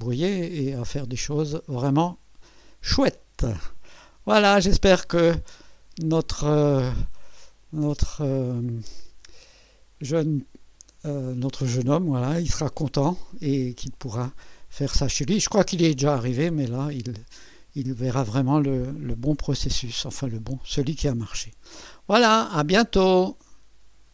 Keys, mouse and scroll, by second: 0.7-3.3 drag, 5.1-6.3 right drag, 6.8-11.9 drag, 13.1 scroll up 2, 13.9 scroll down 2, 15.9-17.1 drag, 17.1 click, 22.0 right click, 24.0 click.